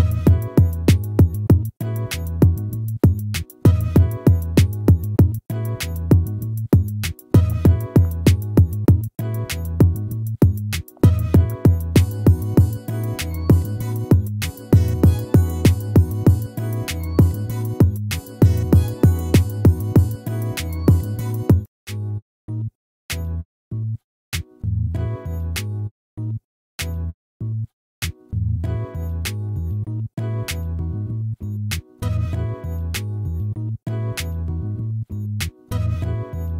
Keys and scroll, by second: 15.7 ctrl++, 20.8 ctrl+z, 25.1 ctrl+-, 28.1 ctrl++, 32.2 ctrl+z, 34.2 ctrl+-.